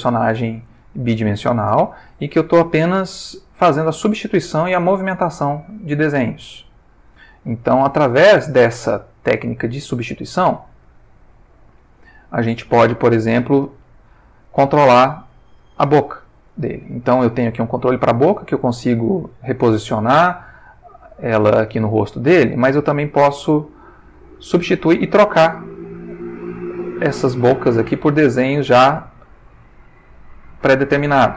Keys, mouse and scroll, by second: 1.0-1.8 ctrl+shift+middle drag, 2.4-8.6 drag, 9.7 click, 11.7 click, 12.5 shift+middle click, 13.9 shift+middle click, 14.7 ctrl+shift+middle click, 16.0 click, 17.4 g, 21.1 Escape, 22.8-29.9 drag, 30.5 click.